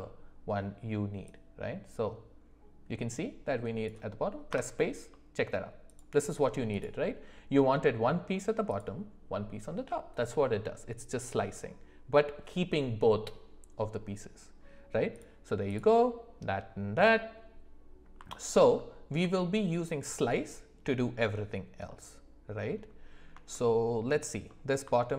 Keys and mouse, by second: 1.2-4.9 drag, 5.1 middle click, 6.7 click, 8.7 click, 15.1 click, 15.6 click, 18.3 alt+middle click, 19.3 shift+middle click, 20.0 click, 21.9-22.7 middle drag, 23.5 shift+middle click, 24.5 middle click, 25.0 alt+middle click.